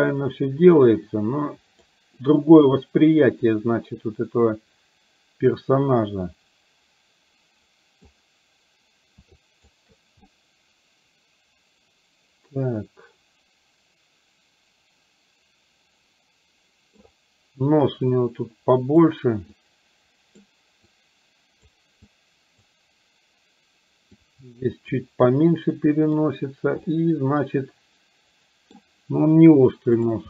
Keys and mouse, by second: 0.7-1.9 drag, 5.9-8.0 middle drag, 9.5 shift+click, 10.2-17.0 middle drag, 18.1-19.1 drag, 19.6 click, 20.9 click, 22.1 click, 24.2 click, 25.9 middle click, 27.0-28.7 middle drag.